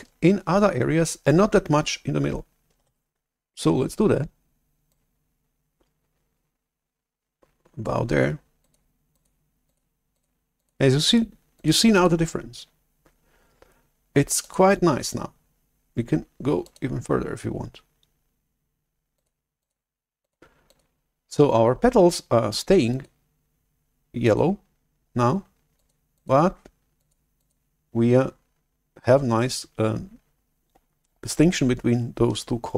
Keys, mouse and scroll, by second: 2.9 shift+super+F11, 5.4 click, 8.2 click, 9.0 click, 9.5 click, 10.0 click, 10.5 click, 10.9 click, 11.4 click, 11.8 click, 14.4 click, 16.6 click, 19.1 click, 19.5 click, 20.1 click, 20.6 click, 22.9 click, 24.1 click, 25.7 click, 26.0 click, 26.9 click, 27.3 click.